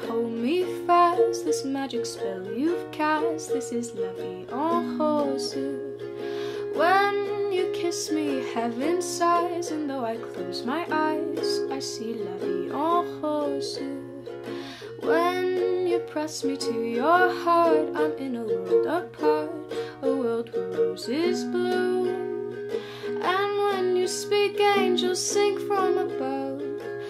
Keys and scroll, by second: 4.9 u, 13.9-14.8 typing, 16.1 Tab, 16.2-17.8 typing.